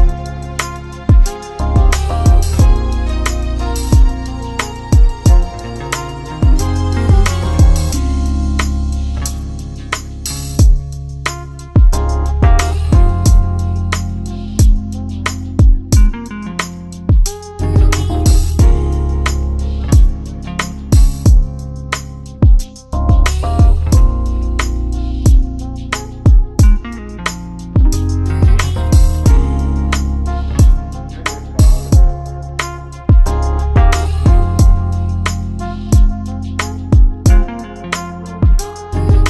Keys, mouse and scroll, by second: 0.6 click, 4.0 right click, 5.6 click, 8.0 click, 9.1 click, 9.4 ctrl+a, 10.6 click, 11.4 click, 14.0 click, 17.7 click, 20.7 click, 22.9 click, 25.1 click, 26.5 click, 29.9 click, 31.6 click, 33.5 click, 34.6 click.